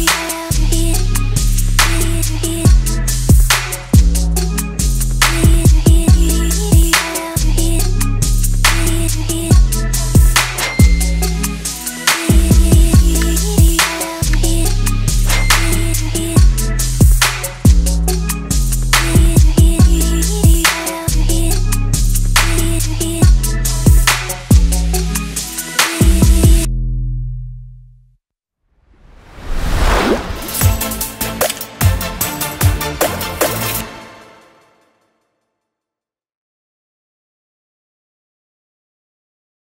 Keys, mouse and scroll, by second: 0.0-0.5 typing, 0.8 click, 3.5 click, 4.1 space.